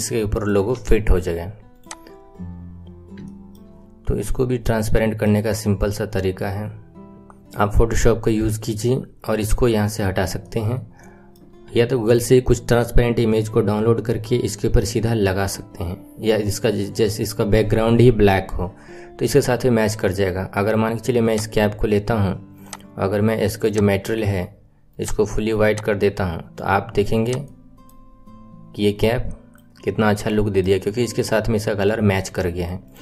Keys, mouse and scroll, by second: 0.7 KP_1, 1.0-1.8 scroll down 5, 1.8 click, 2.2-2.8 scroll up 4, 2.8-3.3 scroll down 3, 3.3-7.2 shift+middle drag, 7.2-7.7 scroll up 3, 7.7-10.0 middle drag, 10.0-10.6 scroll down 2, 10.6-11.7 middle drag, 11.7 KP_1, 14.0-15.5 scroll down 4, 20.7-21.3 scroll up 3, 21.3 click, 23.6 click, 25.5 click, 27.2 click, 27.4-28.0 middle drag, 28.0-28.3 scroll up 4, 28.3-28.7 scroll down 5, 28.9-29.8 middle drag, 29.8 scroll up 3, 30.3-30.7 middle drag, 30.7-31.5 scroll up 5, 31.5-32.3 scroll down 3, 32.3 middle click, 32.8 click.